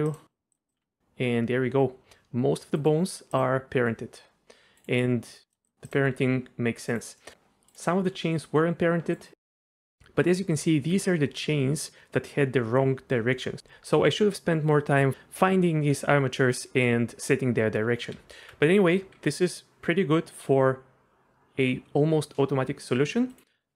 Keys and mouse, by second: 0.5 drag, 0.8 r, 3.7 r, 5.6 click, 6.1-7.3 r, 6.9 drag, 7.2 middle click, 8.0 r, 9.4 r, 9.8 click, 18.3 alt+r, 19.1 r, 23.3 drag, 23.5 middle click.